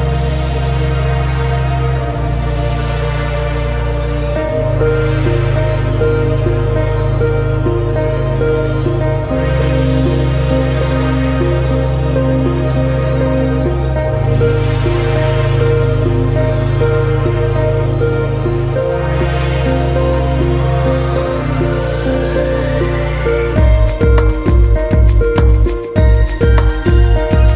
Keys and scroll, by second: 2.6 ctrl+space, 5.3 ctrl+a, 6.7 ctrl+v, 22.0 ctrl+c, 24.1 ctrl+v, 26.4 ctrl+alt+space.